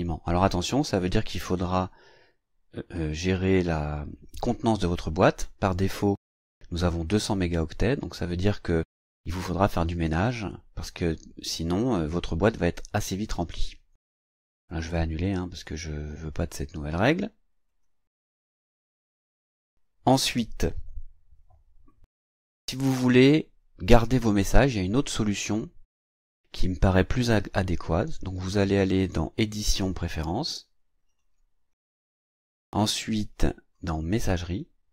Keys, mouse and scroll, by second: 15.1 click, 17.7 click, 19.5 click, 29.2 click, 31.1 click, 33.3 click, 34.4 click.